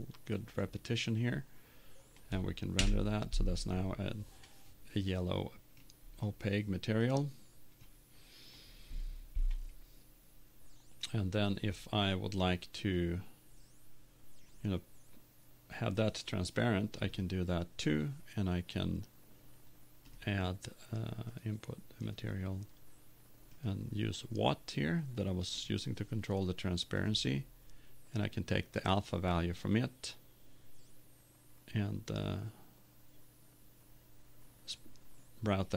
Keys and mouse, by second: 3.4 F12, 8.5 click.